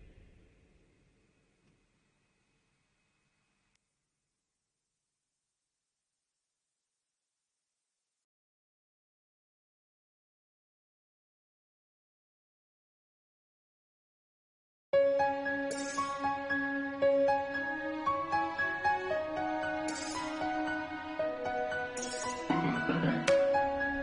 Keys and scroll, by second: 0.5 ctrl+t, 2.7 ctrl+t, 4.4 ctrl+t, 4.7 shift+Down, 5.2 Return, 5.8 ctrl+s, 7.0 ctrl+t, 7.6 shift+Up, 7.7 shift+Down, 8.3 Return, 8.4 ctrl+s, 14.5 ctrl+s, 15.3 ctrl+0, 15.4 ctrl+s, 15.5 space, 16.6-18.5 typing, 17.0 Return, 19.1 ctrl+alt+z, 19.7 ctrl+alt+z, 20.1 3, 22.7 ctrl+s, 23.0 ctrl+alt+z, 23.4 ctrl+s.